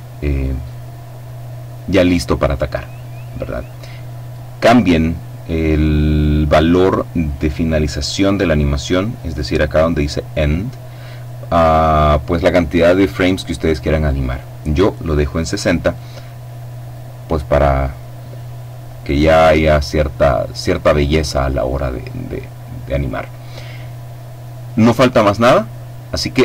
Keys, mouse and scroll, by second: 17.1-17.7 scroll down 2, 19.5-20.6 scroll up 1, 20.6-21.3 scroll up 1, 22.0-23.1 scroll down 1, 25.1-26.4 scroll up 1.